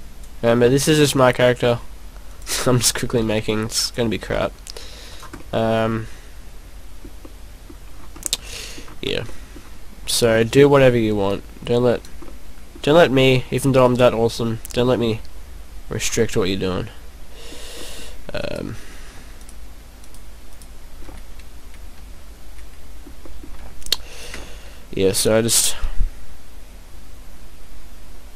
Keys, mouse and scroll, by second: 1.0 e, 2.4 click, 3.2 click, 3.3 e, 3.9 click, 4.8 s, 5.2 click, 5.5 middle click, 7.2 middle click, 7.8-8.2 scroll up 4, 8.2 middle click, 8.9-9.2 scroll down 4, 9.3 middle click, 10.1 right click, 10.9 click, 12.5 middle click, 12.9 scroll down 2, 14.0 right click, 14.4 click, 16.2 middle click, 17.9 middle click, 18.5 right click, 19.4 shift+right click, 20.2 shift+right click, 20.5 shift+right click, 21.1 middle click, 22.6 middle click, 23.3 middle click, 23.8 shift+right click, 24.1 shift+right click, 24.4 middle click.